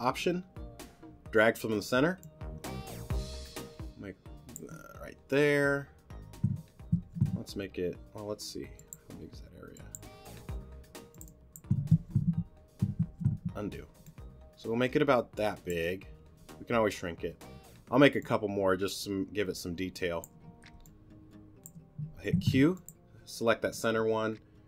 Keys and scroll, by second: 7.0 super+z, 12.0 super+z, 14.0 alt+shift+super+z, 22.3 alt+shift+q, 22.8 q.